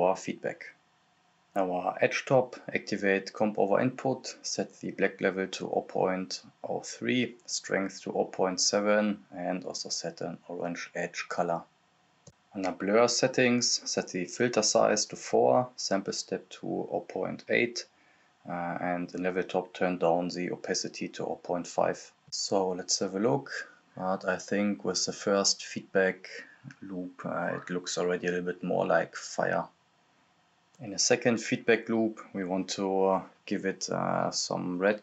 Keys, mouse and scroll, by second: 2.2 click, 4.2 Return, 5.0-6.4 drag, 7.0 click, 9.1 click, 10.5 click, 11.4 Return, 12.4 Return, 12.4 scroll up 1, 12.7 click, 14.3-15.5 drag, 15.5 click, 18.3 click, 19.3 click, 19.3-21.2 drag, 21.2 right click, 21.5 click, 22.4-24.7 drag, 24.7 scroll up 1, 25.9 click, 26.8 scroll up 1, 28.4-29.0 scroll down 1, 29.6 click, 30.1-30.7 scroll down 1, 30.7 click, 30.7-31.6 typing, 31.5 click, 32.5 right click, 32.7 typing, 33.2 click, 34.2 right click, 34.3-35.0 typing.